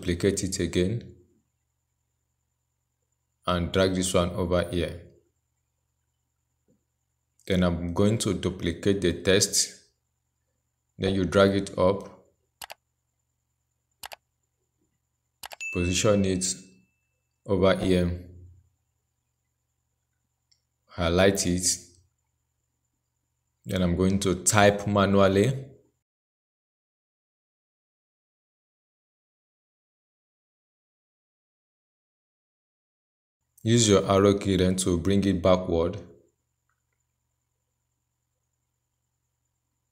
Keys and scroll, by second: 8.9 ctrl+j, 22.1 ctrl+a.